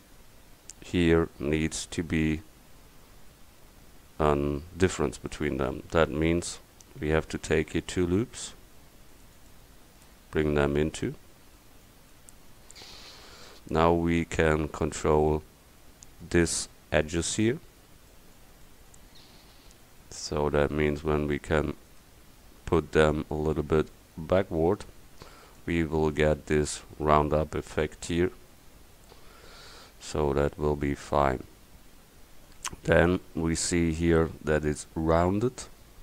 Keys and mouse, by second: 7.5 ctrl+r, 17.4 middle click, 20.8-23.8 right drag.